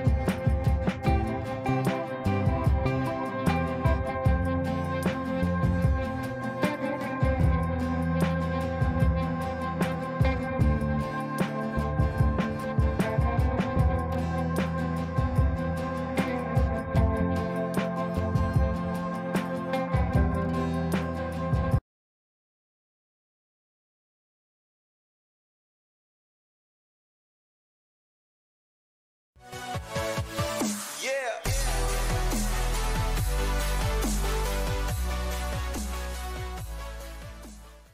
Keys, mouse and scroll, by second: 0.8 space, 3.8 ctrl+space, 5.4 shift+click, 6.3 r, 6.7 click, 9.8 b, 10.5 click, 12.1 shift+F2, 13.4-14.9 drag, 14.9 right click, 15.4 click.